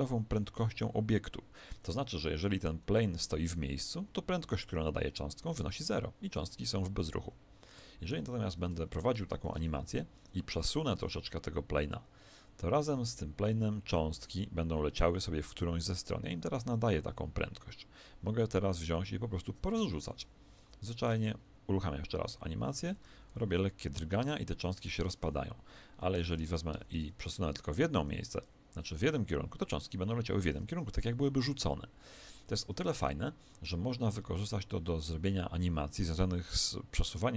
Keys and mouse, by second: 9.3 Escape, 9.7 alt+a, 10.9 g, 20.8 Escape, 22.7 alt+a, 23.3 g, 26.1 Escape, 26.7 alt+a, 27.4 g, 31.5 Escape.